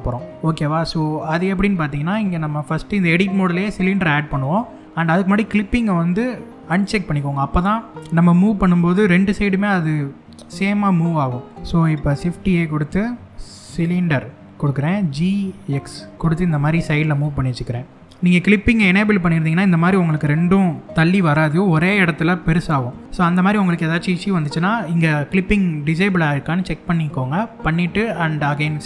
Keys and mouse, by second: 6.3 click, 6.9 middle click, 11.8 shift+a, 14.6 g, 15.3 x, 16.8-17.9 middle drag, 26.1 middle click.